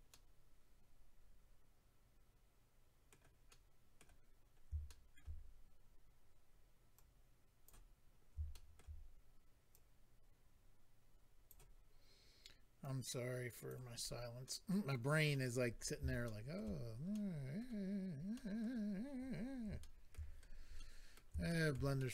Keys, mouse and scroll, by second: 0.1 middle click, 3.5 middle click, 4.4 scroll up 1, 4.9 shift+middle click, 5.1 middle click, 5.4 scroll up 1, 6.6 scroll up 2, 6.9 click, 8.0-8.5 scroll up 3, 8.5 shift+middle click, 9.7 click, 11.8-12.7 scroll down 1, 12.8 click, 14.0-14.4 scroll down 2, 14.4 middle click, 15.5-16.2 scroll down 5, 16.2 shift+middle click, 16.5 middle click, 17.1 middle click, 17.8-18.3 scroll up 2, 18.3 middle click, 19.3 scroll down 1, 19.8 shift+middle click, 20.3-20.7 scroll down 1, 20.7 middle click, 21.4 shift+middle click, 21.7 middle click, 22.0 middle click.